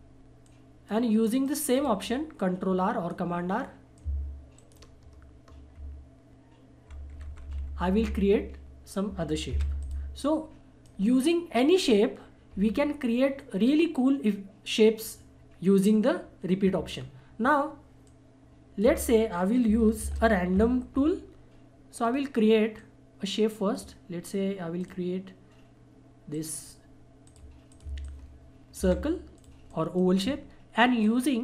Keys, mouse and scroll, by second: 0.4-4.6 shift+drag, 4.6 ctrl+shift+right click, 5.8 ctrl+shift+r, 9.8-13.2 shift+drag, 17.0-18.0 shift+scroll down 1, 18.0 shift+click, 18.8 shift+Delete, 20.1 shift+F4, 22.0 click, 22.0-25.0 drag, 26.3 right click, 27.2 click, 28.8 Delete, 29.3-31.4 drag.